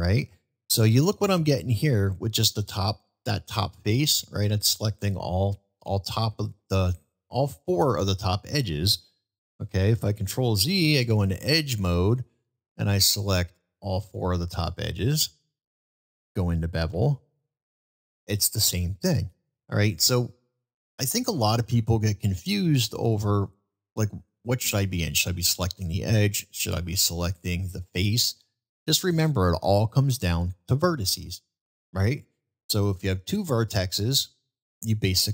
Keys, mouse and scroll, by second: 10.0 ctrl+z, 11.0 2, 14.0 ctrl+click, 14.6 ctrl+click, 15.4 ctrl+click, 16.9 ctrl+b, 20.5-20.9 middle drag, 21.7-22.5 middle drag, 23.9-24.5 middle drag, 25.0-25.4 middle drag, 27.2-27.6 middle drag, 28.6-30.1 middle drag.